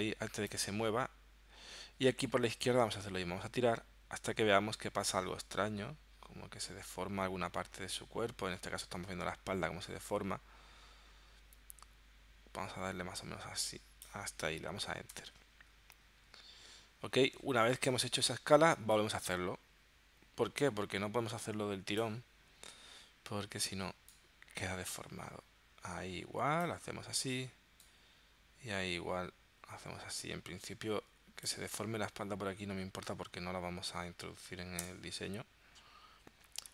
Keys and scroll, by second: 15.2 Return, 34.9 Return.